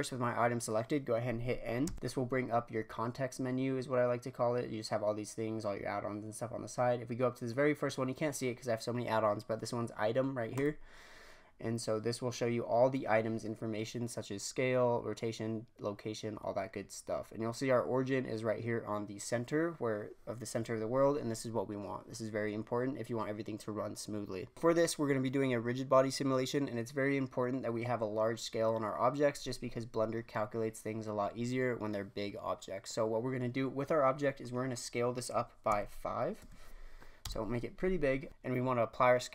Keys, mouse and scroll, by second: 1.8 n, 10.5 click, 17.6 scroll up 1, 24.5-26.1 scroll up 5, 34.0-35.6 scroll down 7, 35.6 s, 38.3 space.